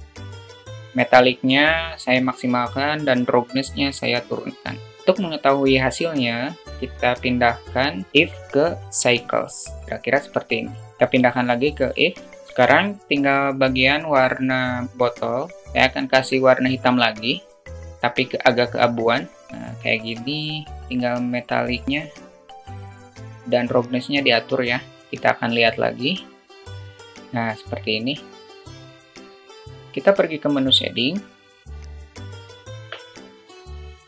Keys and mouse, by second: 0.0 click, 8.1-8.9 drag, 10.9 click, 12.2 alt+shift+middle drag, 21.4-22.3 drag, 22.7-24.3 drag, 26.3-27.1 drag, 28.6-29.7 drag.